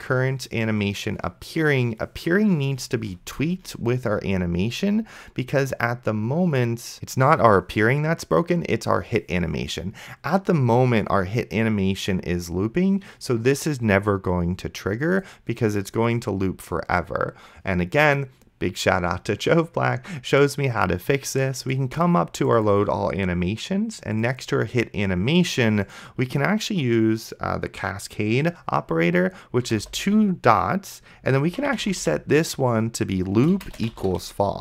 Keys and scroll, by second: 29.9 ., 31.3-34.6 typing.